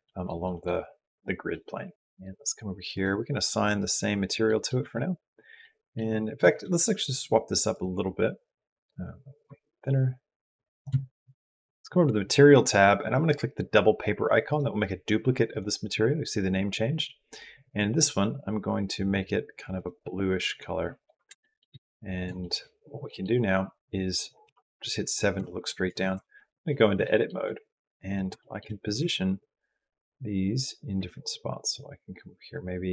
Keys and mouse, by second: 0.2 middle click, 1.4 middle click, 2.7 click, 4.2 middle click, 4.3 click, 4.4 middle click, 4.6 Tab, 5.4 middle click, 7.5 click, 9.2-10.6 shift+drag, 14.3 click, 20.8 click, 21.2 shift+middle click, 22.2 shift+middle click, 22.9 click, 24.2 KP_7, 25.8 Tab, 26.8 shift+click, 27.8 click, 28.2 shift+middle click, 28.8 g.